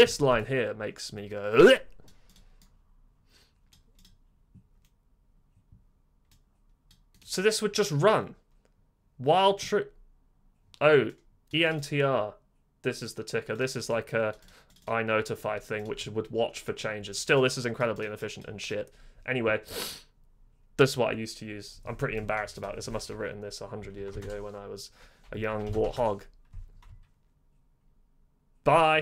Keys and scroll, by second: 23.9 :, 24.1 Return, 25.5-26.3 typing.